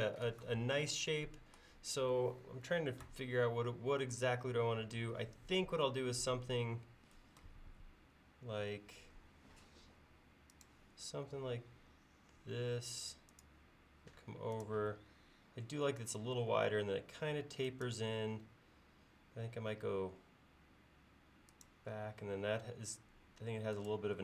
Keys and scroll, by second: 4.9 l.